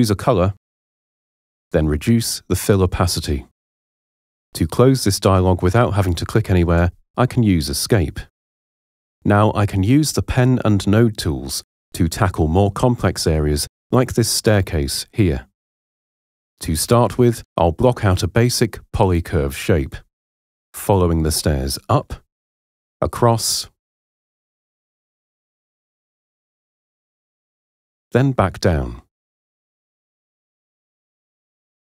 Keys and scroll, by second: 6.7 Escape.